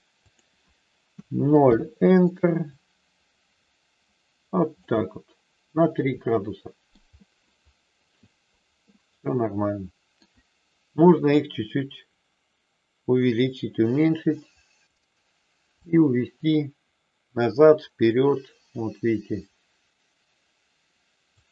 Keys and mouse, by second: 0.3-1.8 drag, 2.7-4.8 drag, 5.9-6.9 middle drag, 8.9-10.1 middle drag, 11.5-14.8 drag, 15.8-21.3 drag.